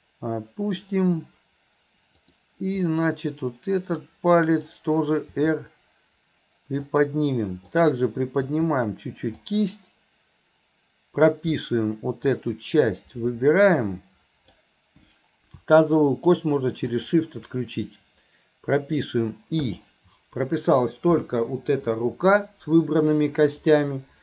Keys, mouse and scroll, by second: 2.2 click, 2.9-4.0 middle drag, 4.4-4.8 middle drag, 7.7 click, 12.4-14.7 drag, 16.1 click, 16.9 click.